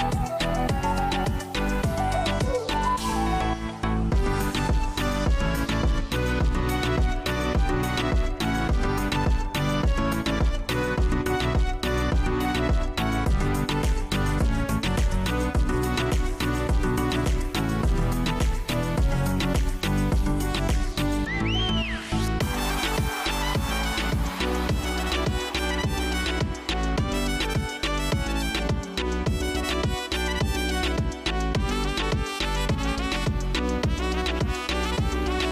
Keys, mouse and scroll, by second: 0.6-1.2 scroll down 6, 1.7 click, 4.1 click, 6.8 scroll up 4, 8.7 click, 11.5 scroll down 5, 12.0 scroll up 2, 12.7 scroll up 2, 13.7 scroll, 15.2-17.1 drag, 26.3 scroll, 33.0 scroll down 6.